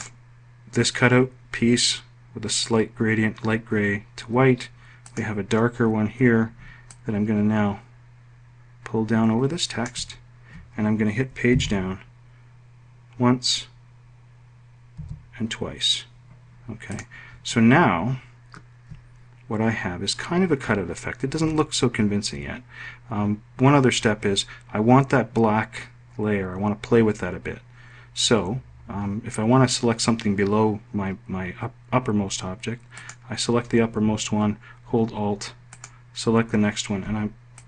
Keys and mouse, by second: 4.5 click, 6.3-7.4 ctrl+drag, 11.0 Page_Down, 14.4 Page_Down.